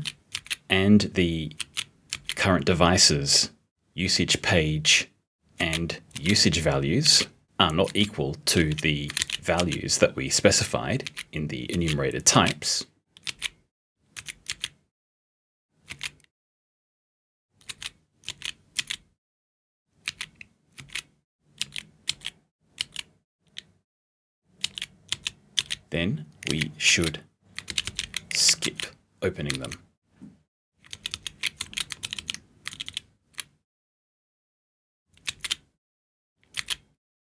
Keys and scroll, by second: 0.4 b, 1.7 s, 2.2 b, 5.6-12.4 typing, 26.5 t, 27.7 *, 28.4 p, 29.5 *, 32.0 *, 32.7 *, 36.6 *.